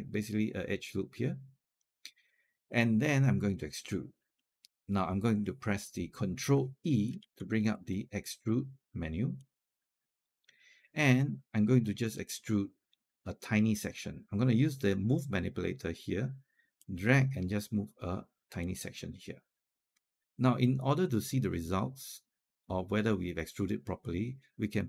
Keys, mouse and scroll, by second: 7.0 ctrl+e, 8.3-10.3 drag, 16.6-20.3 drag.